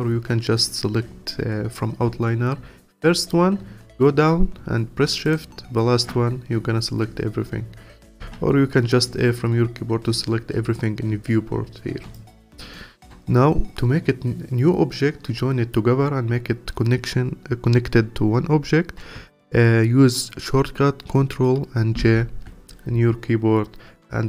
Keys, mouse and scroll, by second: 0.6 click, 2.9-5.2 scroll down 18, 5.2 shift+click, 6.6-8.2 scroll up 23, 8.2 a, 11.6 scroll down 2, 12.1 alt+click, 12.7-15.9 alt+middle drag, 22.1 ctrl+j.